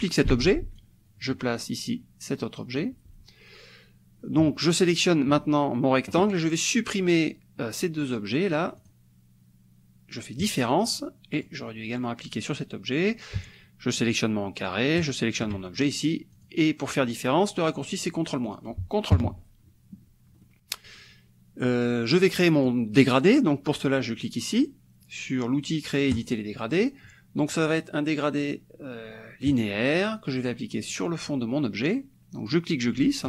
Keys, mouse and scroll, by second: 0.3 ctrl+d, 0.8-3.0 ctrl+drag, 4.9 shift+click, 8.8 click, 10.5 click, 10.9 click, 11.4 click, 15.0 shift+click, 16.3 click, 18.5 click, 19.2 ctrl+KP_Subtract, 20.5 click, 22.5 click, 22.9-26.1 middle drag, 26.1 click, 29.5 click, 30.9 click, 32.5-33.2 drag.